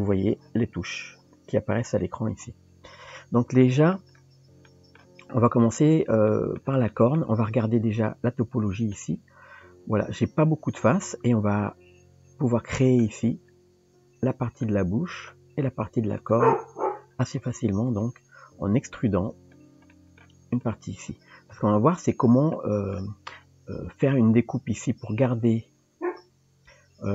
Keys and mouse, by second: 0.0 KP_1, 0.8 KP_3, 3.5 shift+click, 3.6 shift+middle drag, 4.7 shift+middle drag, 6.3 shift+middle drag, 6.9-7.2 middle drag, 7.9 Tab, 9.0-13.0 middle drag, 14.6 middle click, 16.2 click, 18.0 click, 18.9 click, 19.9 middle click, 20.6 shift+click, 22.6 middle click.